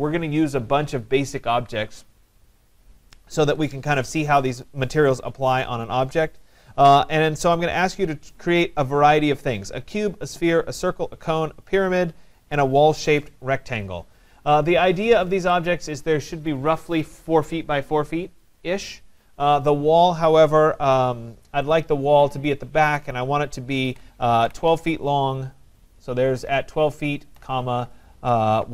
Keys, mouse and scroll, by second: 15.7 click, 21.7 click, 23.6-25.2 typing, 27.4 ,, 28.6-28.7 typing.